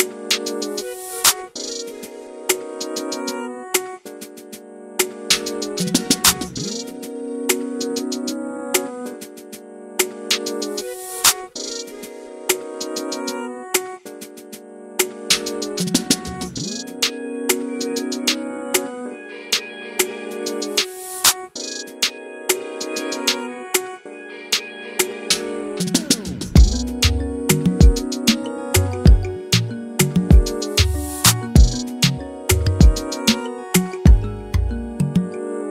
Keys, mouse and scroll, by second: 0.2 middle click, 0.4 ctrl+z, 0.5 middle click, 0.8 shift+click, 1.1 middle click, 1.5 middle click, 1.8 shift+click, 1.9 middle click, 2.3 click, 3.1 KP_1, 3.3 scroll down 2, 3.3 scroll up 1, 3.5 Tab, 3.6 scroll down 1, 3.7 alt+a, 3.8 shift+middle click, 3.9 click, 4.0 scroll up 1, 4.1 Tab, 4.6 ctrl+r, 5.4-5.8 ctrl+z, 6.2 ctrl+b, 7.0 2, 7.1 middle click, 8.1 click, 9.2 scroll down 2, 9.4 scroll up 1, 9.6 Tab, 9.7 alt+a, 9.8 scroll down 1, 9.8 middle click, 10.3 scroll up 1, 10.4 click, 10.8 KP_1, 10.9 Tab, 11.0 scroll up 1, 11.4 z, 11.7 x, 12.6 click, 13.3 ctrl+z, 13.4 ctrl+z, 13.5 ctrl+z, 13.6 ctrl+z, 13.9 click, 15.1 click, 16.6 scroll down 1, 16.7 shift+middle click, 16.8 scroll up 1, 17.0 scroll down 1, 17.0 scroll up 1, 17.2 Tab, 17.3 alt+a, 17.4 scroll down 1, 17.4-18.1 scroll up 4, 17.5 click, 17.7 Tab, 17.8 shift+middle click, 18.1 click, 18.3 middle click, 18.7 click, 19.4 middle click, 19.8 shift+middle click, 20.0 scroll up 2, 20.1 middle click, 20.4 shift+click, 20.7 middle click, 20.9 click, 21.6 s, 21.9 middle click, 22.1 scroll down 1, 22.1 middle click, 22.4 ctrl+b, 23.7 click, 24.7 ctrl+z, 24.8 ctrl+z, 24.9 ctrl+z, 25.2 s, 26.1 scroll down 1, 26.3 Tab, 26.3 alt+a, 26.4 scroll up 2, 26.5-27.1 middle drag, 27.1 scroll down 1, 27.3 shift+middle click, 27.4 scroll up 1, 27.5-27.9 middle drag, 27.9 scroll down 1, 27.9 middle click, 28.3 KP_1, 28.5 click, 28.6 shift+middle drag, 28.8 scroll up 1, 29.1 Tab, 29.2 scroll down 1, 29.4 3, 29.6 shift+click, 30.0-30.6 right drag, 30.6-31.2 scroll up 1, 31.2 e, 32.5 i, 33.0 scroll down 1, 33.2 Tab, 33.3 alt+a, 33.5 middle click, 33.9 scroll up 1, 34.0 ctrl+z, 34.1 ctrl+z, 34.5 Tab, 34.6 alt+a, 34.7-35.1 scroll down 3, 34.8 middle click, 35.1 shift+middle click, 35.2-35.7 scroll up 5, 35.3 click, 35.5 shift+middle click.